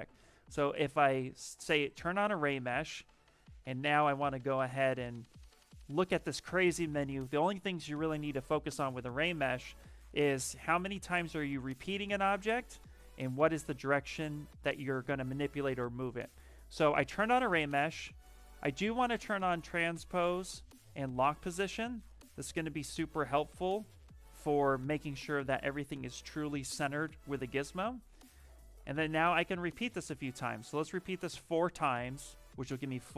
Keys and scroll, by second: 9.7 shift+m, 14.6 shift+m, 24.2 ctrl+z.